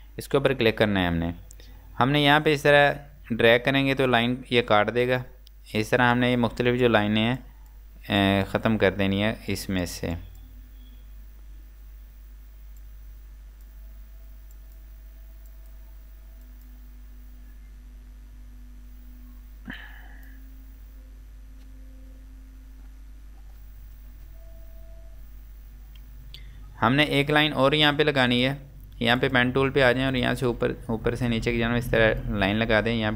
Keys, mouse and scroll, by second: 1.5 scroll up 1, 2.6 click, 10.9 scroll down 1, 12.9 click, 19.8 click, 27.1 click.